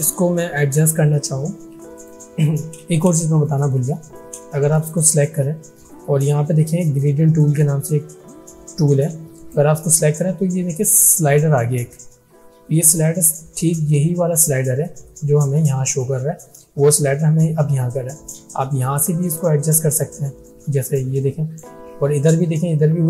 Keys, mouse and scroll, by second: 2.0 click, 3.2 space, 3.5 click, 3.7-4.4 space, 4.7 click, 9.4 click, 20.5-21.8 drag.